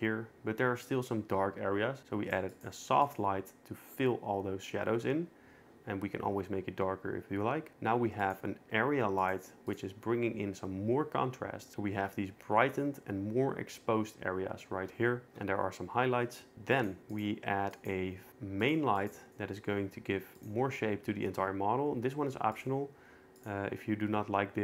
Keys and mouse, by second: 2.0 click, 2.5 click, 3.0 click, 8.2 click, 9.2 click, 9.7 click, 16.7 click, 17.1 click, 17.7 click, 18.7 click, 19.0 click, 20.4 click, 22.6-23.5 drag.